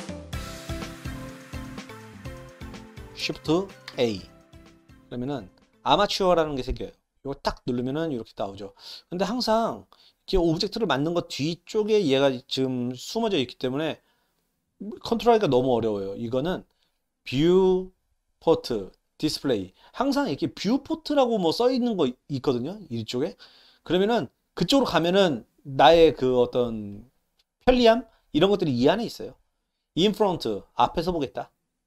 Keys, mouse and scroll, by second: 3.8 shift+a, 19.5 click, 31.4 click.